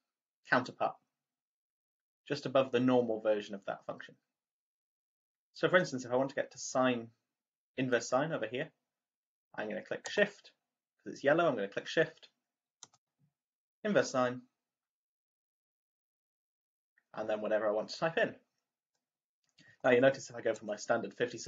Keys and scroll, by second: 19.6 5, 20.5 6.